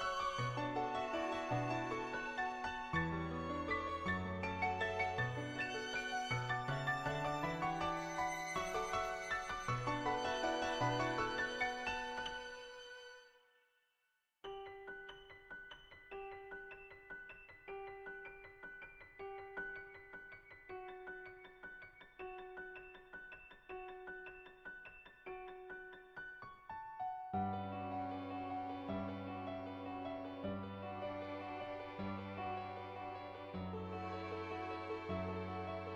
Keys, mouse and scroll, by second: 0.6 click, 1.0 click, 1.3 click, 1.7 click, 2.5 click, 2.9 click, 3.4 click, 3.9 click, 4.6 click, 5.0 click, 5.3 click, 5.8 click, 6.7 click, 7.7 click, 8.3 click, 9.3 click, 10.2 click, 10.4 ctrl+z, 10.7 click, 11.2 click, 11.7 ctrl+z, 11.9 click, 13.6 click, 14.4 click, 15.1 ctrl+z, 16.0 click, 16.5 ctrl+z, 16.7 click, 17.2 click, 19.1 click, 19.5 ctrl+z, 21.1-23.4 middle drag, 23.7 shift+middle click, 24.1 shift+middle click, 24.5 middle click, 25.0 shift+middle click, 26.8 click, 27.4 click, 27.7 ctrl+z, 28.4 click, 28.9 click, 29.4 click, 29.9 click, 30.2 ctrl+z, 30.3 click, 32.1 click, 32.5 ctrl+z, 32.7 click, 33.5 click, 34.9 ctrl+z, 34.9 click, 35.8 click.